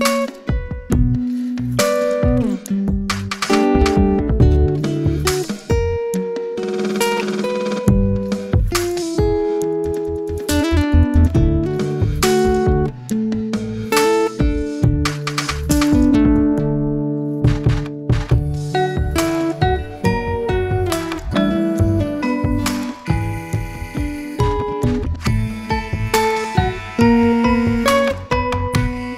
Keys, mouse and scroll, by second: 0.1-0.5 scroll up 2, 0.5 middle click, 1.0 click, 1.5 Tab, 2.1 click, 2.8 click, 3.6 r, 4.5 g, 5.9 Tab, 6.2 scroll up 1, 6.4 click, 6.7 scroll down 1, 6.8 middle click, 7.7 click, 8.3 click, 9.5 click, 10.2 click, 10.7 click, 11.5 click, 12.7 click, 13.3 Tab, 13.9 r, 15.2 Tab, 15.7 click, 15.9-16.5 scroll up 2, 16.5-17.0 scroll down 1, 17.0 click, 17.3 scroll up 1, 17.5-19.1 scroll down 2, 20.0-21.5 middle drag, 21.9-22.7 scroll up 1, 22.7 click, 23.0-25.4 right drag, 25.4 ctrl+z, 25.7-27.0 middle drag, 27.0 click, 27.2-27.7 scroll up 3, 27.7-28.8 middle drag, 28.8 click.